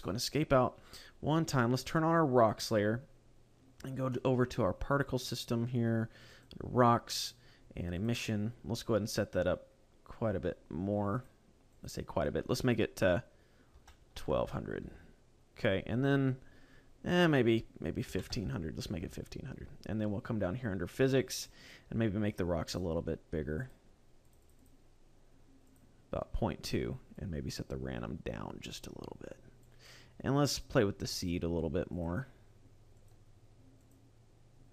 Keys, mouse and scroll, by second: 0.8 scroll down 2, 2.2 click, 3.9 middle click, 4.8 click, 6.0 click, 7.8 click, 9.2 click, 11.4 click, 16.8 click, 19.6-21.0 scroll down 3, 21.0 click, 21.3-21.6 scroll down 1, 22.4 click, 23.4 click, 24.0 click, 24.2 click, 24.4 click, 25.5 click, 26.9 click, 30.0-30.9 scroll up 2, 30.9 click, 31.8 click, 32.8 click, 33.6 click.